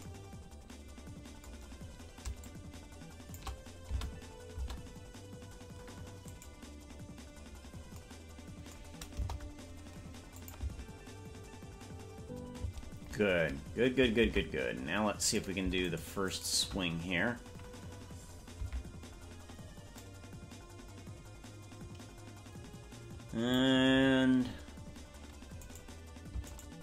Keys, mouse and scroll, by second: 2.4-3.4 shift+drag, 4.0 space, 4.8 space, 6.6 right click, 9.2 KP_0, 10.5 click, 10.8 space, 12.8 space, 14.4 ctrl+Tab, 15.4 right click, 16.4 shift+right click, 18.6 KP_Decimal, 20.1-23.7 drag, 25.8 right click, 26.6 shift+right click.